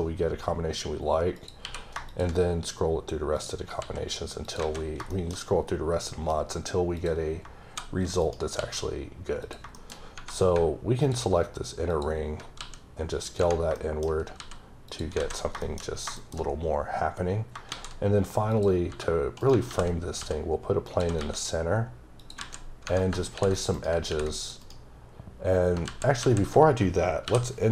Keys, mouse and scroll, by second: 1.4 click, 1.6 q, 2.1 click, 2.5-3.4 scroll up 4, 3.4 click, 3.8 s, 4.5 click, 4.6 alt+a, 4.8 scroll down 3, 5.1 shift+middle click, 6.3-7.0 scroll up 2, 7.0 click, 7.7 s, 8.3 right click, 8.6 s, 9.4 click, 9.8 shift+middle click, 9.9-10.5 shift+scroll up 4, 10.1 Tab, 11.0 alt+click, 11.9 alt+double click, 12.6 s, 13.3 click, 13.8 shift+middle click, 14.4 s, 14.9 click, 15.2-16.1 scroll down 7, 15.6 middle click, 16.2 middle click, 17.1-17.5 scroll up 1, 17.7 a, 18.5 click, 18.9 s, 19.4 right click, 19.7 g, 20.9 click, 21.0 s, 22.2 click, 22.4 z, 23.5 click, 23.8 right click, 24.1 r, 24.4 click, 24.6 right click, 25.9 ctrl+z, 26.2 ctrl+z.